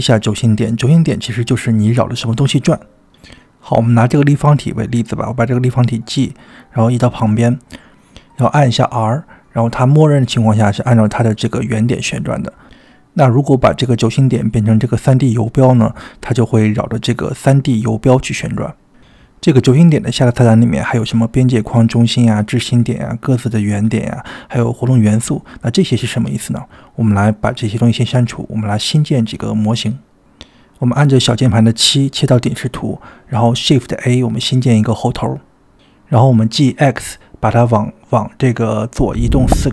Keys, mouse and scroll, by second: 6.2 click, 7.3 g, 9.9 r, 13.3-14.9 drag, 15.4 r, 17.7 click, 20.7-21.2 middle drag, 22.9-26.8 drag, 27.5-28.2 middle drag, 28.8 click, 29.9 x, 30.8 middle click, 32.0 KP_7, 32.9-33.6 shift+middle drag, 33.9 shift+a, 35.3 g.